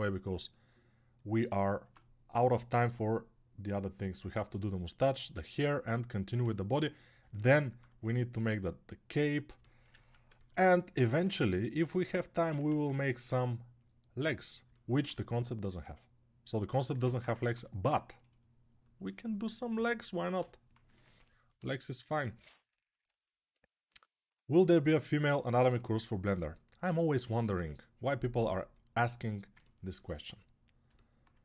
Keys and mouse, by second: 1.6 Tab, 6.3 s, 7.0-8.2 alt+middle drag, 9.8-12.6 ctrl+alt+shift+right drag, 12.4 ctrl+z, 17.1 ctrl+Tab, 19.5 ], 20.0 ], 20.1 ], 20.1 ].